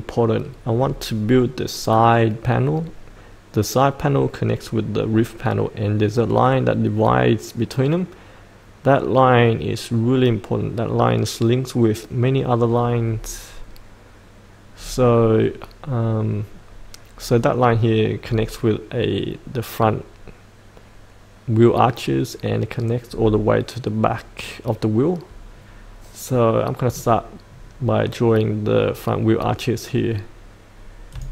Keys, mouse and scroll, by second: 0.7-14.8 scroll down 1, 15.4-26.6 scroll up 1, 26.6 middle click, 27.5-31.1 scroll down 1, 31.1 click.